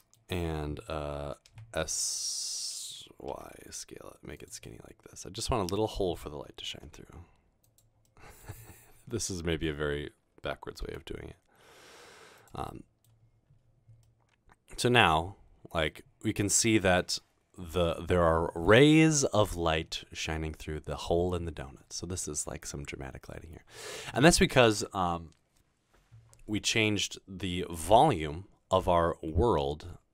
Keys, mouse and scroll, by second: 1.7 typing, 3.3 typing, 6.8 typing, 11.0 g, 12.4 click, 12.7 middle click, 13.8 middle click, 15.6 middle click.